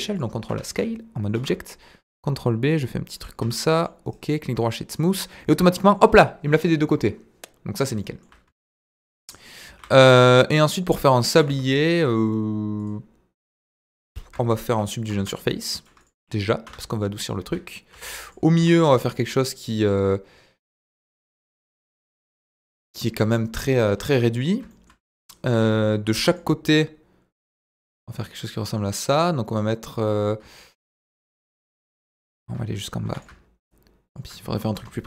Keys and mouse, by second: 0.4 Tab, 1.3 ctrl+b, 3.1 click, 3.4 Tab, 3.7 middle drag, 4.0 right click, 4.5-5.0 middle drag, 5.7 middle drag, 6.9 KP_1, 9.6 shift+a, 11.3 s, 11.4 z, 12.8 click, 15.3 ctrl+3, 15.8 right click, 16.6 Tab, 17.9 ctrl+r, 18.5 Escape, 18.9 s, 20.9 click, 21.6 z, 23.5 middle click, 24.7 shift+middle click, 26.1 ctrl+r, 33.0 ctrl+r, 34.9 Tab.